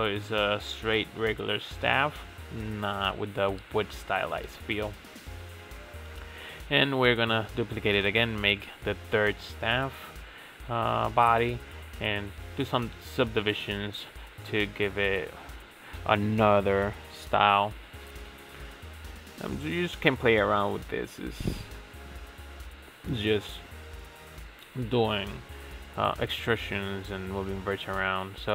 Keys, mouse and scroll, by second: 1.5 click, 1.6-4.3 drag, 4.3 Tab, 4.8-5.6 scroll up 4, 5.6 drag, 6.0-6.8 shift+middle drag, 6.8-7.8 shift+drag, 7.8 ctrl+e, 9.6 click, 11.1 click, 11.9 g, 12.8 click, 13.0 g, 14.5 click, 14.8 g, 17.1-18.1 shift+middle drag, 18.1 click, 18.8 g, 20.1 scroll down 3, 20.3-20.7 shift+middle drag, 20.7 Tab, 21.6 KP_Divide, 22.3-25.3 middle drag, 25.3 click, 26.0 e, 27.9 e.